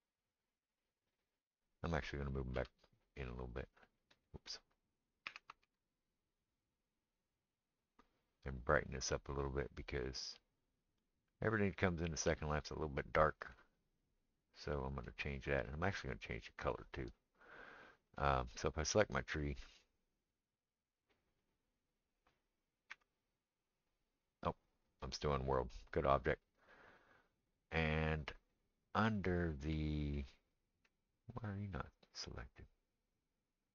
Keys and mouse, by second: 2.6 s, 5.3 s, 18.1 click, 22.9 KP_Decimal, 25.0-33.7 drag.